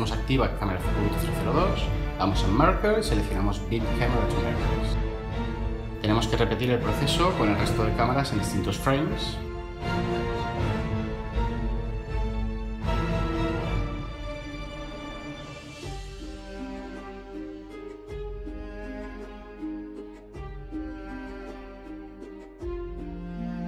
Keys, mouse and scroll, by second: 5.9 0, 6.0 Return.